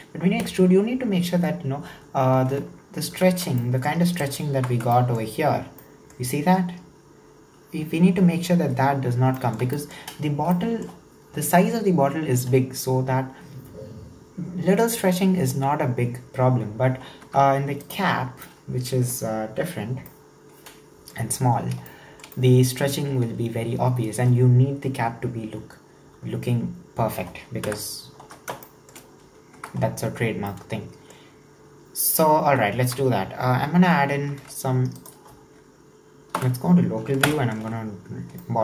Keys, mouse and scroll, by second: 2.5-3.3 scroll down 5, 3.3 alt+z, 3.6 middle click, 4.2 right click, 4.6 Tab, 4.9 shift+middle click, 5.3-5.8 scroll up 3, 5.8-8.9 middle drag, 9.0-9.4 scroll down 3, 9.4 shift+middle click, 10.1-10.5 scroll up 2, 10.5-13.6 shift+middle drag, 17.3 Tab, 17.8 right click, 18.1-18.5 scroll down 3, 18.5-21.3 middle drag, 21.3-21.9 scroll up 2, 21.9-25.5 shift+middle drag, 27.6 KP_1, 28.2 scroll up 5, 28.7-29.3 shift+middle drag, 29.3-29.6 scroll up 1, 29.6 Tab, 29.9-30.5 scroll down 6, 30.5-32.5 middle drag, 32.5 Tab, 32.9 Tab, 34.1 ctrl+r, 36.4 /, 37.3 ctrl+KP_7, 38.1 scroll down 2, 38.4-38.6 shift+middle drag.